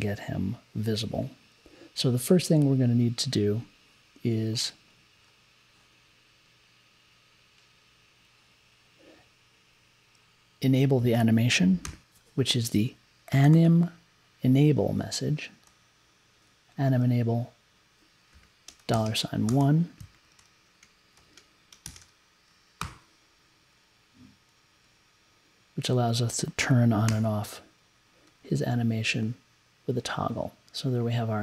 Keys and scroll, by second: 11.8 m, 13.0-14.1 typing, 15.6 e, 18.3-20.1 typing, 21.6-22.5 typing, 22.8 super+j, 27.1 t.